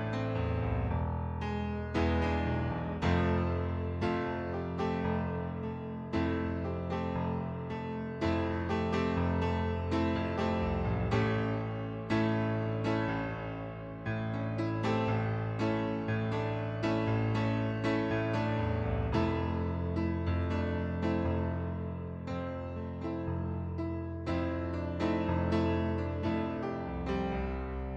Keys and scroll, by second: 7.5 ctrl+d, 13.9 ctrl+z, 18.5 ctrl+d.